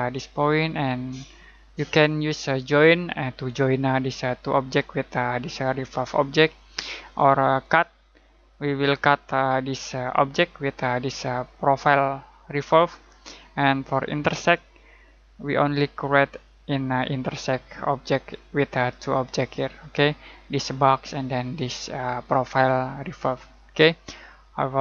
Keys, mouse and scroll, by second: 7.6 click, 14.3 click.